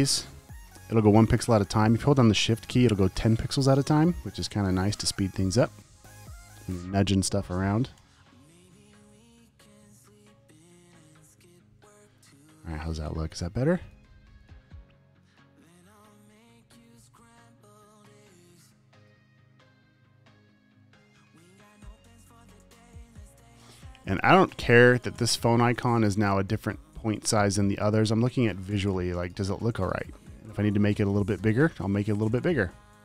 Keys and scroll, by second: 0.8 Up, 2.9 shift+Up, 3.4 shift+Down, 4.1 Up, 5.4 Down, 5.7 Up, 8.0 Up, 11.1 Down, 13.0 super+;, 13.2 v, 13.9 space, 14.5 alt+super+space, 17.0 super+space, 18.7 super+t, 22.8 v, 22.9 space, 24.1 space, 24.7 super+space, 25.2 t, 29.7 space, 30.2 space, 31.6 super+t.